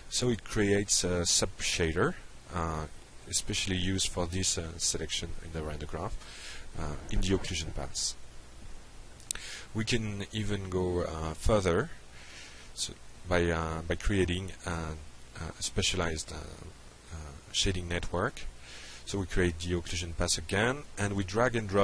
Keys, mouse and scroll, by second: 6.1-7.2 drag, 9.2 click, 10.0-11.0 typing, 12.9 click, 13.6 click, 14.0 click, 15.1 click, 15.7 click, 17.0 click, 18.7-19.1 drag, 19.4 click, 20.3 alt+Tab.